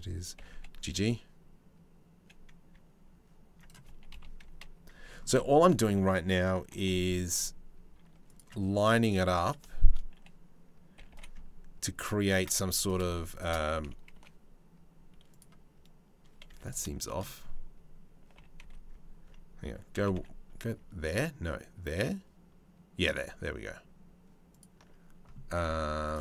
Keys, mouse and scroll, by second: 0.0 g, 3.7 KP_3, 6.3 g, 9.0 click, 10.6 g, 12.3 3, 12.5 click, 13.0 shift+click, 13.8 Delete, 16.1 2, 16.3 click, 16.7 shift+middle click, 18.0 g, 18.5 ctrl+middle click, 25.7-26.2 drag.